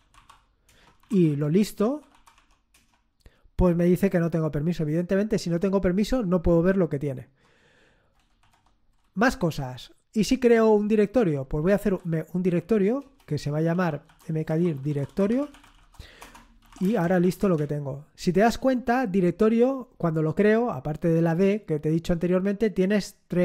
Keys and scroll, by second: 0.0-2.6 typing, 0.6 Return, 2.7 Return, 8.3 ctrl+l, 11.8-17.7 typing.